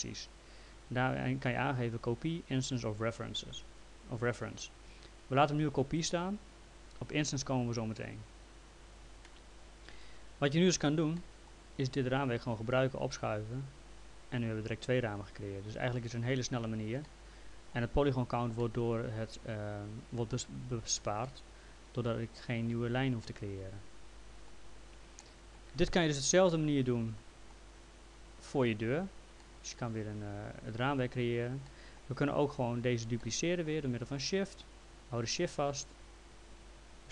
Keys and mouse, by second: 9.3 click, 11.2 alt+middle click, 12.3 click, 17.1 alt+middle click, 18.6 alt+middle click, 21.2 alt+middle click, 23.2 alt+middle click, 25.2 alt+middle click, 26.5 alt+middle click, 29.4 alt+middle click, 31.7 alt+middle click, 36.0 shift+click.